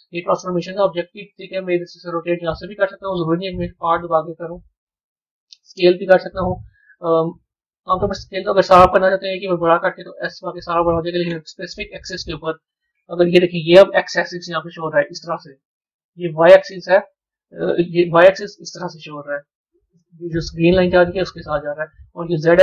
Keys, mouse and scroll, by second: 0.6 click, 1.7-3.6 drag, 3.6 ctrl+z, 4.2 r, 6.0-7.3 drag, 7.9 click, 8.3 s, 9.2 click, 9.9 s, 12.9 KP_1, 18.0-22.6 middle drag.